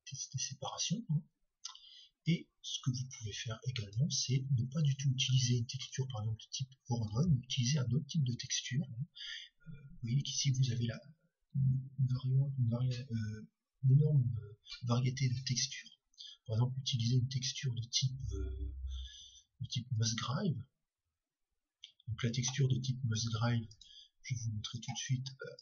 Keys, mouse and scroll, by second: 2.3-4.7 drag, 5.9 x, 7.8 shift+a, 24.8 click.